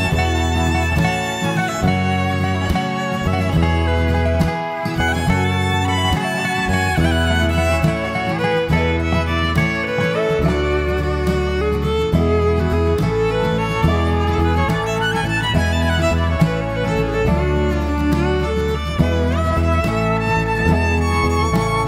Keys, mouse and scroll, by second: 2.1 middle click, 20.5 middle click.